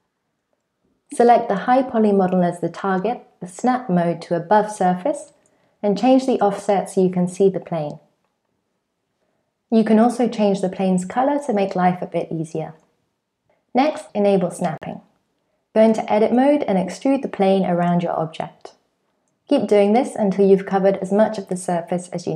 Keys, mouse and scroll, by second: 2.6 click, 4.6 click, 7.5 click, 8.7 middle click, 9.1 click, 11.3 scroll down 1, 11.5 click, 11.8 click, 12.0 click, 13.1 click, 13.7 click, 14.0 click, 16.0 alt+z, 16.0 click, 16.0-22.3 typing, 17.3 shift+click, 17.9 click, 18.1 click, 18.3 click, 19.7 shift+middle click, 21.1 scroll down 2.